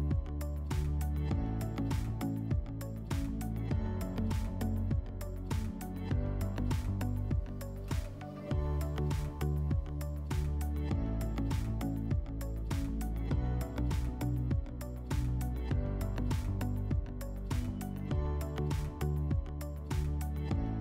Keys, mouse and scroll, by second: 0.0-2.0 typing, 1.7 click, 5.6 click, 6.6 click, 8.0 click, 8.1 click, 8.8-11.3 typing, 9.6 Tab, 11.7 Return, 12.5-14.2 typing, 15.3 click, 16.9 click, 18.4 click, 19.2 click.